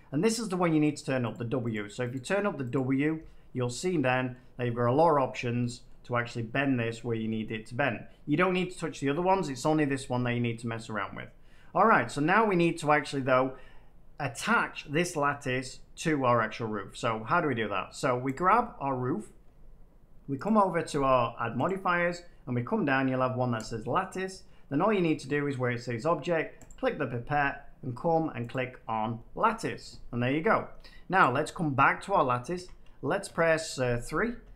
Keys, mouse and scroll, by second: 1.2-3.7 drag, 4.2 middle click, 5.8 middle click, 13.1 middle click, 18.3 click, 20.4 click, 21.6 click, 23.6 click, 26.6 click, 28.4 click, 31.1 click, 32.5-33.2 typing, 34.2 Tab.